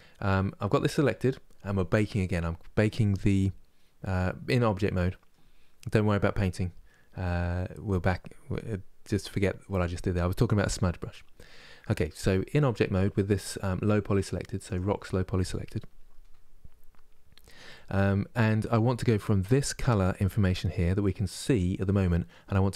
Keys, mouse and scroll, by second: 14.4 click.